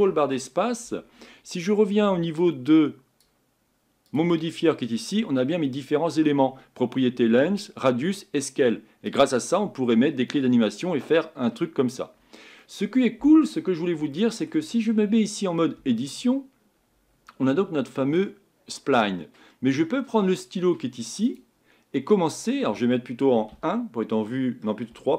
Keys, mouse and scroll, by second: 0.0 ctrl+space, 2.5-12.1 drag, 12.6-15.8 middle drag, 15.8 Tab, 17.5-21.4 middle drag, 21.4-23.5 drag, 23.5 KP_1, 24.9 KP_3.